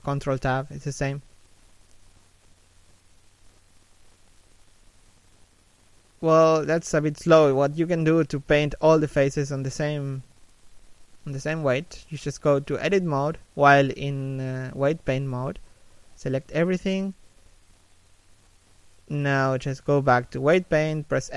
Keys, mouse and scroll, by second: 2.2 click, 3.1 click, 6.3-7.1 scroll down 1, 8.5 middle click, 9.0 a, 9.4 shift+middle click, 10.2 alt+right click, 10.7 b.